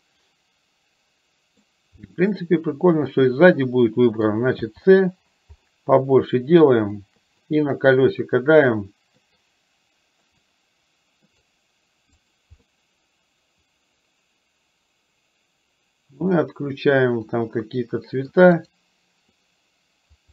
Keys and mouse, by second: 0.1 middle click, 1.4 middle click, 2.1-4.3 middle drag, 12.7-16.2 middle drag, 16.3-18.4 middle drag, 18.6 right click.